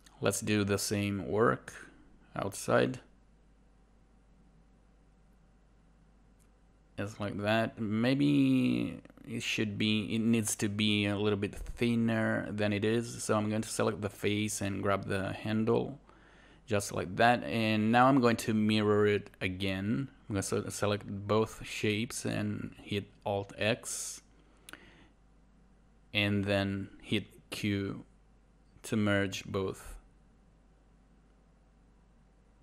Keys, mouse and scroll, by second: 6.4 alt+right click, 6.6 alt+click, 8.6 alt+right click, 8.8 alt+click, 30.1 alt+right click, 30.4 alt+click.